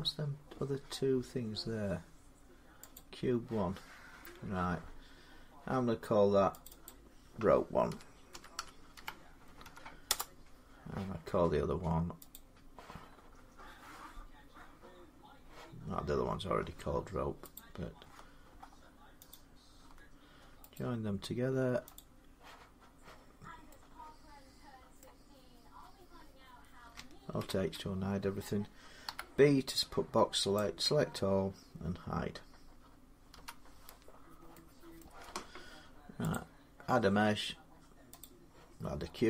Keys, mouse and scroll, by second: 0.5-1.5 scroll up 3, 2.8 click, 2.9 middle click, 6.5 click, 6.7 click, 7.7-9.4 typing, 9.9 Return, 11.8 typing, 12.1 click, 13.6-14.9 scroll, 17.2 middle click, 17.4 click, 19.1 shift+click, 20.6 right click, 21.8 click, 23.2 scroll down 1, 24.8 middle click, 27.2 alt+h, 28.9 b, 30.4 click, 33.1 h, 33.9 scroll down 4, 34.8 middle click, 34.8-35.2 scroll, 36.1 click, 37.0-38.0 scroll down 4, 38.2 click, 38.6-39.2 scroll down 7.